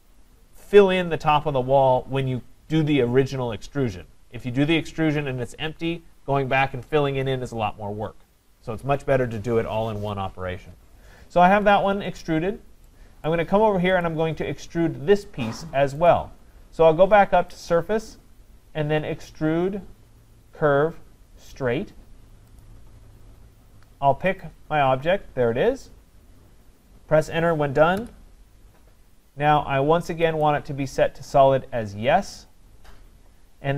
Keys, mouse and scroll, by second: 11.3-11.9 scroll down 4, 11.9-13.3 scroll, 13.3 right click, 14.0 click, 16.1 click, 17.7 click, 22.6 click, 24.4 click, 28.0 Return, 30.4 click.